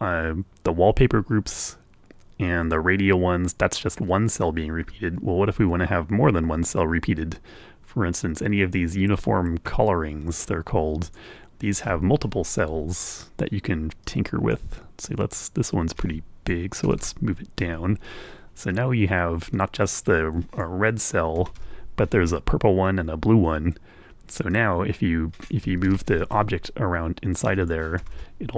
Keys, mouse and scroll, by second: 11.2 click, 12.4 scroll down 1, 14.2 click, 15.2-16.8 drag, 16.9 Return, 18.9-20.9 drag, 21.5 Return, 23.9-25.7 drag, 25.9 Escape, 26.2-27.9 drag, 28.0 Return.